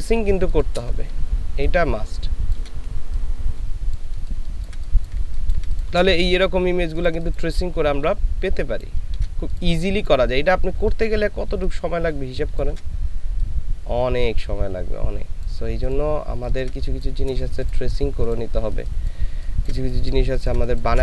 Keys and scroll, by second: 0.2 space, 1.1 shift+space, 4.0 ctrl+space, 5.3 ctrl+space, 6.9 ctrl+space, 7.9 ctrl+shift+space, 16.3 ctrl+space, 18.6 space, 19.3 ctrl+space, 20.2 ctrl+space.